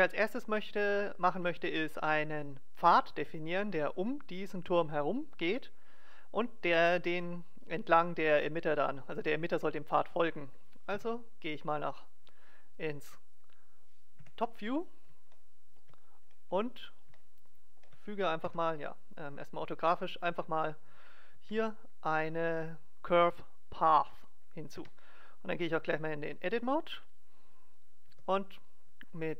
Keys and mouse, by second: 14.1 KP_7, 15.4 middle click, 18.4 KP_5, 20.9 middle click, 21.4 shift+a, 24.9 Tab, 27.7 click, 28.0 g.